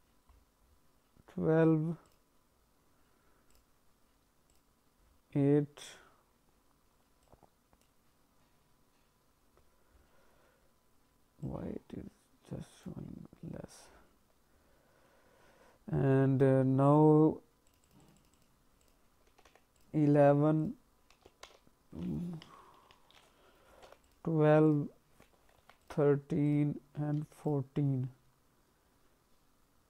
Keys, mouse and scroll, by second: 2.0 click, 4.5 click, 4.9-6.4 scroll down 4, 7.2 click, 9.4-9.9 scroll up 4, 9.9-10.2 scroll down 2, 11.4 click, 13.3-13.8 scroll down 1, 13.8-17.6 scroll down 5, 17.6 click, 17.8 click, 18.0 click, 18.1 click, 18.3 click, 18.7 click, 19.4 KP_1, 20.6 click, 22.5 BackSpace, 24.6 click, 26.4 click.